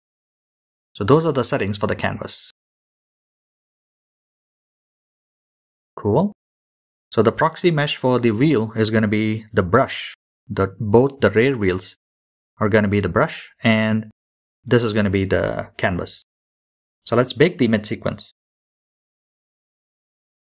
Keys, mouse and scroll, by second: 0.9-3.1 scroll up 9, 3.1-4.7 scroll down 10, 5.4 scroll down 3, 6.9-9.9 scroll down 7, 11.6-20.4 drag.